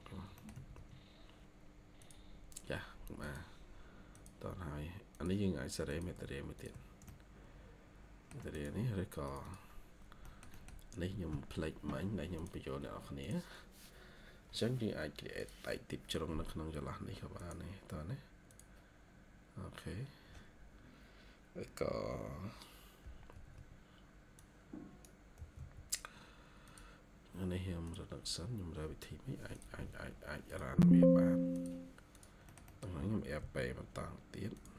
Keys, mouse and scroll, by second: 0.0 scroll down 1, 0.3 middle click, 0.4 Escape, 0.6-0.9 scroll up 1, 7.0 shift+middle click, 9.3 double click, 10.1 middle click, 10.5-11.5 scroll down 1, 15.7 scroll up 1, 23.2 Escape, 23.4 Escape, 25.0-26.0 typing, 32.4 middle click, 32.9-33.3 typing.